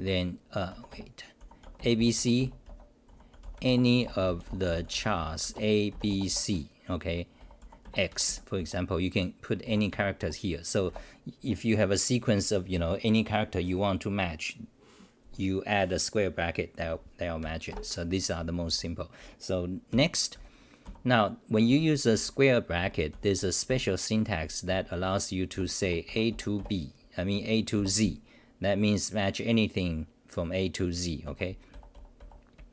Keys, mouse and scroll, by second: 0.0-2.6 typing, 0.7 Home, 2.2 Home, 7.1 Home, 7.1-8.6 typing, 9.6 u, 10.2 Home, 10.9 9, 17.7 ctrl+g, 18.7-23.6 typing, 24.7-26.3 typing, 27.3 BackSpace, 31.3 Home, 31.7 r.